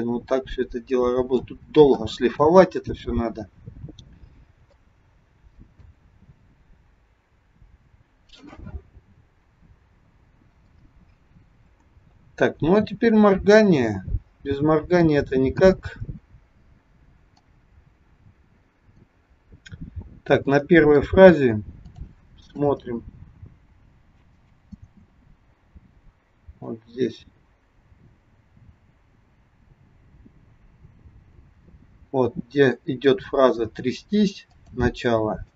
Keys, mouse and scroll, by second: 2.8-3.8 scroll down 5, 3.8-4.3 scroll down 1, 4.3-4.6 scroll up 1, 4.8 shift+middle click, 13.5-14.6 scroll down 9, 15.0 middle click, 16.0-16.9 scroll up 4, 17.3 click, 19.5-20.3 scroll up 5, 20.4 middle click, 21.9 click, 22.6 space, 24.8 space, 26.8 click, 31.9-32.5 scroll up 4, 34.5 click, 35.4 shift+middle click.